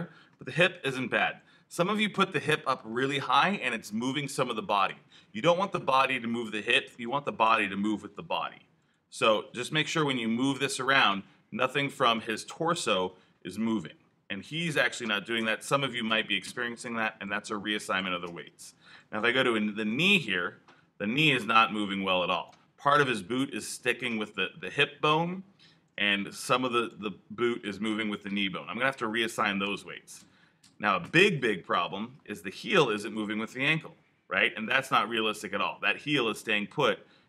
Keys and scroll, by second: 1.2 alt+super+z, 15.6 super+z, 16.9 alt+super+z, 29.5 super+z, 31.6 alt+super+z.